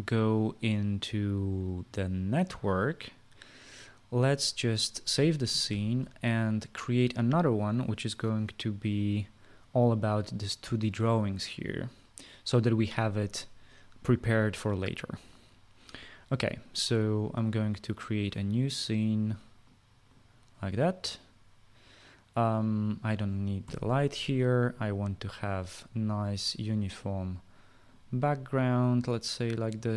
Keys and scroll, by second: 6.2 ctrl+s, 24.2 Delete.